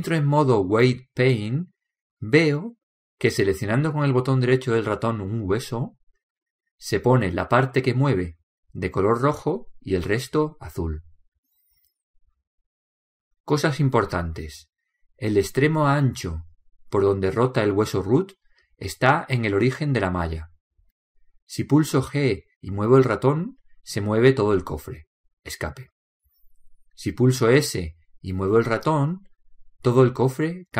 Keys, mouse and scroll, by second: 1.5-3.3 drag, 6.3-9.3 right drag, 10.8-12.6 right drag, 17.7-19.0 middle drag, 19.0 right click, 19.3 click, 19.3-21.5 middle drag, 19.8 click, 19.9 click, 20.4 click, 23.7 g, 27.8 s.